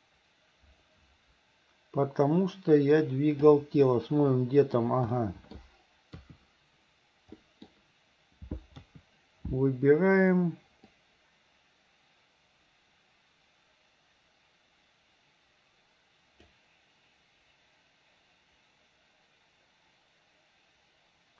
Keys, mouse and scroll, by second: 3.9-4.8 middle drag, 5.2-5.7 middle drag, 6.2 KP_3, 7.5 middle click, 8.8 KP_3, 11.0-21.3 drag.